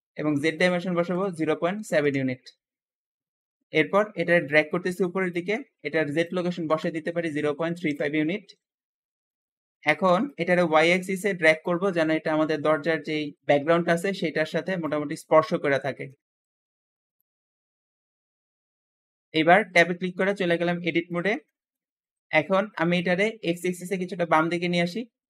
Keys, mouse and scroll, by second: 0.8 KP_0, 0.9 KP_0, 1.1 KP_Decimal, 1.5 KP_7, 1.9 Return, 3.1-3.4 scroll up 1, 3.4 Return, 3.4 7, 4.3 click, 6.0-8.6 drag, 6.5-7.5 typing, 7.7 Return, 7.8 Return, 8.6 scroll down 2, 9.0 shift+middle click, 9.0 3, 9.0 5, 9.8-10.1 scroll up 1, 10.1 shift+middle click, 10.6-11.5 scroll up 1, 11.5 shift+click, 15.0 scroll up 4, 15.3 scroll down 2, 15.7 shift+middle click, 16.2-17.1 scroll up 2, 16.4 shift+middle click, 17.1 click, 17.8-18.3 scroll down 4, 18.3-19.8 middle drag, 19.8 Tab, 20.4-21.0 scroll up 2, 21.0-22.0 shift+middle drag, 22.0-22.4 scroll down 1, 22.4 ctrl+z, 23.3 ctrl+click.